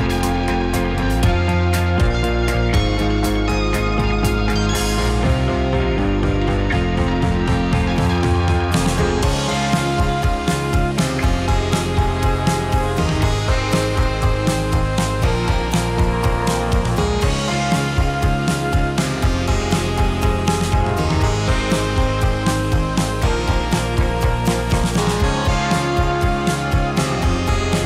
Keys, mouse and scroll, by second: 0.5 r, 1.0 click, 1.2-3.6 middle drag, 3.6 click, 4.0 r, 4.7 r, 5.5-5.8 middle drag, 5.8 r, 6.2 click, 6.3-12.4 middle drag, 13.6-14.7 middle drag, 14.7 click, 15.6-16.3 middle drag, 16.3 r, 17.5 s, 18.0 click, 18.2-21.2 middle drag, 21.2 click, 21.6 r, 22.1 click, 22.2-24.1 middle drag, 24.1 click, 24.6 r, 25.1 drag, 25.3-26.2 middle drag, 26.2 click, 26.5 r, 27.7 middle click.